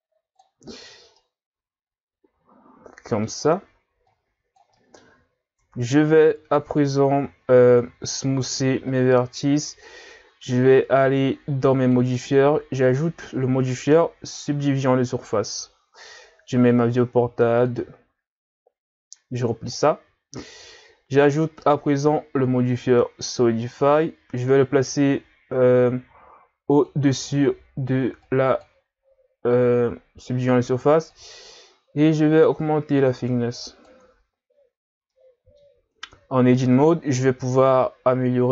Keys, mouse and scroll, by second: 1.2-4.0 middle drag, 4.0 click, 4.8 middle click, 5.2-5.6 scroll up 1, 5.6 Tab, 7.1 w, 8.4 w, 11.8 click, 17.6-24.6 drag, 26.9 click, 31.1 click, 35.1 middle click, 35.9 Tab, 37.2 ctrl+r.